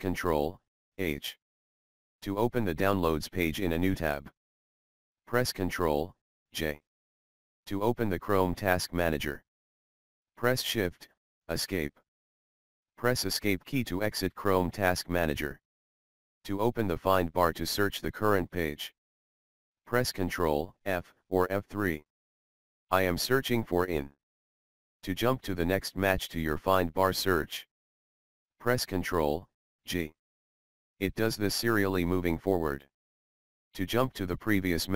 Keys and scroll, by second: 0.7 ctrl+h, 5.7 ctrl+j, 11.6 shift+Escape, 13.6 Escape, 19.5 ctrl+f, 25.8 ctrl+g.